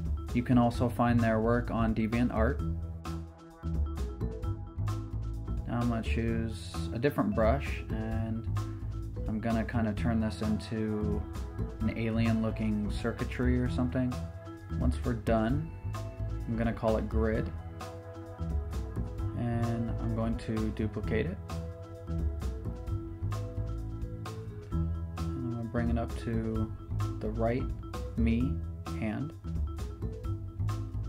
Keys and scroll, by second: 6.1 shift+super+t, 7.6 shift+super+t, 8.7 shift+super+t, 13.2 shift+super+t, 18.5-19.5 typing, 19.8 Return, 22.3 super+j, 22.9 v, 26.8 super+t.